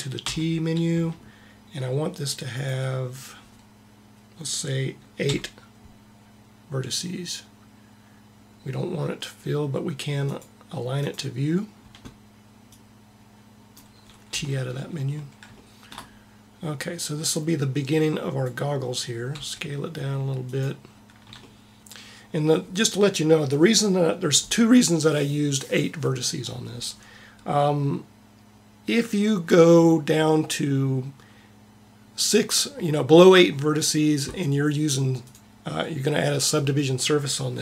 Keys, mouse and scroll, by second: 0.1 t, 10.9-13.1 drag, 14.2 t, 14.9 middle click, 17.1-19.1 drag, 19.2 s, 21.3-27.8 middle drag, 27.9-29.9 middle drag, 35.1-36.9 drag.